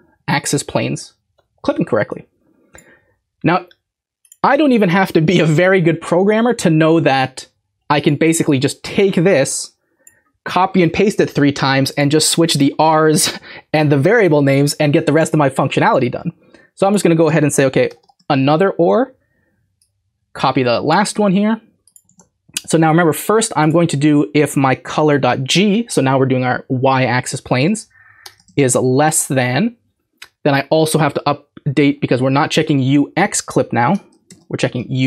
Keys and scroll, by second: 17.9 typing, 21.1 ctrl+c, 22.1 ctrl+v, 24.9 typing, 27.5 Right, 27.6 Right, 28.2 BackSpace, 28.5 <, 28.8 Right, 33.9 BackSpace, 34.3 y.